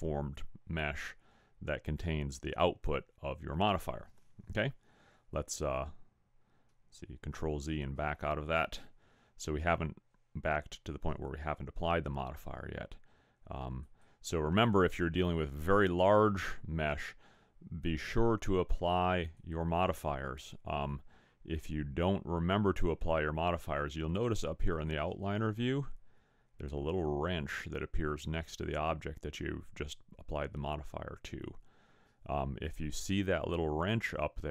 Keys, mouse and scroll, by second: 5.4 ctrl+z, 6.8 ctrl+z, 13.8 click, 24.9 click.